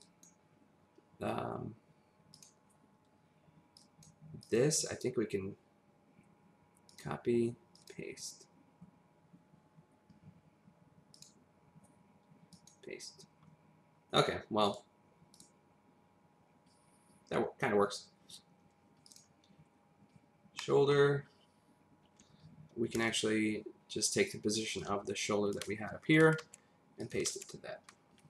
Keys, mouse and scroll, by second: 0.0 click, 4.4 click, 6.9 click, 7.7 click, 11.1 click, 12.5 click, 14.6 click, 15.3 click, 17.7-19.1 scroll up 1, 19.1 click, 20.6 middle click, 24.7 click, 24.8 p, 25.5 click, 26.4 ctrl+c, 27.0 click.